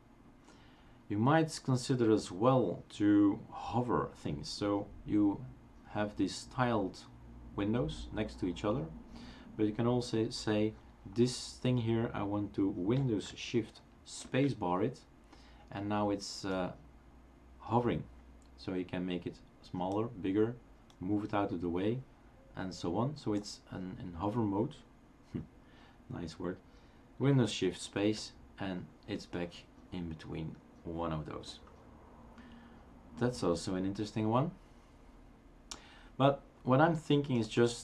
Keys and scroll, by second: 14.2 shift+super+space, 28.0 shift+super+space.